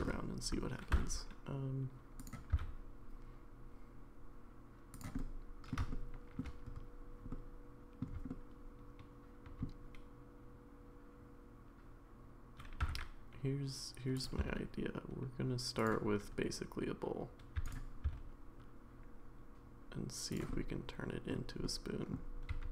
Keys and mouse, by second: 0.9 e, 2.5 s, 5.2 middle click, 5.9 shift+middle click, 7.3 middle click, 8.3-9.6 shift+middle drag, 12.8 e, 14.4 s, 17.6 e, 20.5 middle click, 20.5 s, 21.6 middle click, 22.5 e.